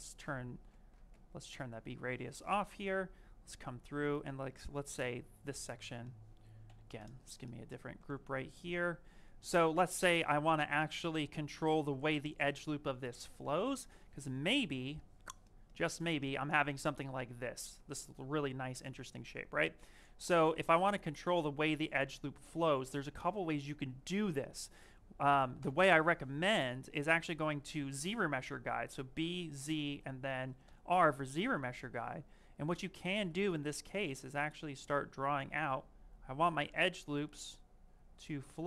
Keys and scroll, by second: 0.1 ctrl+space, 1.0 ctrl+shift+space, 3.9 ctrl+shift+space, 6.5 ctrl+w, 23.5 s, 29.1 z, 30.5 r, 32.8 s.